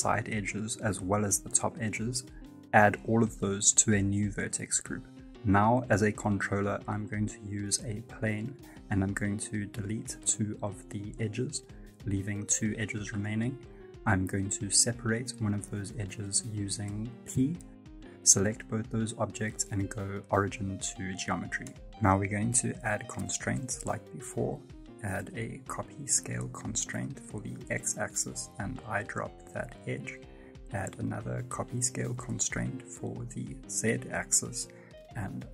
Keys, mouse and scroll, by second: 0.0 alt+right click, 0.4 middle click, 1.0 alt+shift+right click, 2.4 alt+shift+right click, 2.9 middle click, 7.0 click, 7.0 middle click, 7.6 Tab, 8.3 click, 10.3 Tab, 11.2 2, 11.5 right click, 12.1 shift+right click, 12.4 x, 14.5 middle click, 14.8 Tab, 15.6 g, 16.3 middle click, 16.8 Tab, 17.2 right click, 17.4 middle click, 18.3 p, 19.2 Tab, 19.5 right click, 20.0 shift+right click, 20.2 p, 22.5 click, 22.5 middle click, 23.1 right click, 23.3 middle click.